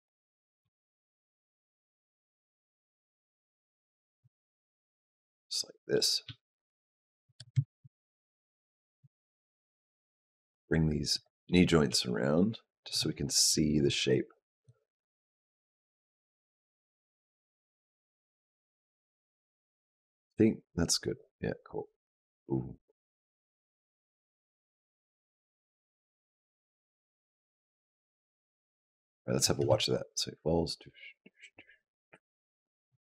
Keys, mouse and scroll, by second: 0.4 g, 3.7 click, 4.0 g, 5.1 middle click, 6.1 g, 7.8 click, 8.3 click, 8.8 g, 10.9 click, 11.3 middle click, 11.7 g, 14.5 click, 29.5 space, 32.8 space.